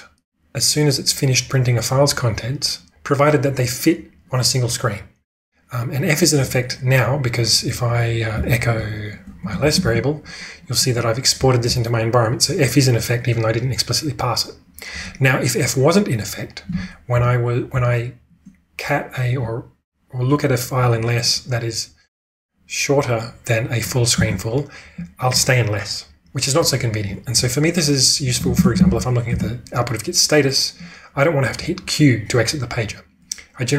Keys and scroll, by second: 8.3 typing, 9.6 ctrl+e, 9.9 Return, 17.1 Up, 17.7 Up, 24.2 Return, 28.1-29.8 typing.